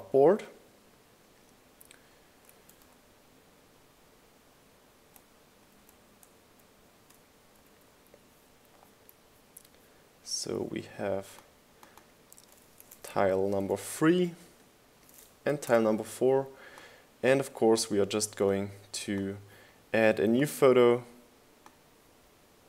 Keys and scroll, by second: 5.3 shift+Down, 8.0 shift+Up, 9.1 Up, 9.8 Up, 13.8 Right, 14.2 typing, 14.8 Return, 16.1 Right, 16.6 typing, 16.9 Return.